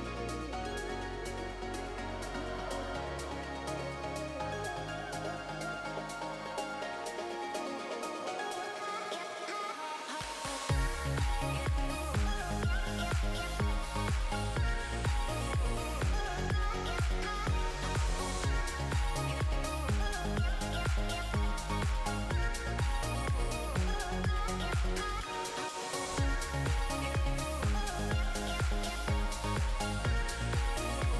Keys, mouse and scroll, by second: 1.5 s, 3.3 click, 5.6 alt+click, 6.3 click, 9.9 alt+a, 10.3 middle click, 11.1 alt+a, 11.2-11.5 scroll down 3, 11.5 middle click, 11.7 alt+z, 12.0 middle click, 13.3 alt+z, 13.5 middle click, 14.4 alt+z, 14.7 Tab, 15.7 scroll down 2, 15.9 shift+middle click, 16.2 middle click, 17.3 alt+a, 17.5 shift+middle click, 23.2 click, 23.6 Tab, 24.5 click, 28.7 click.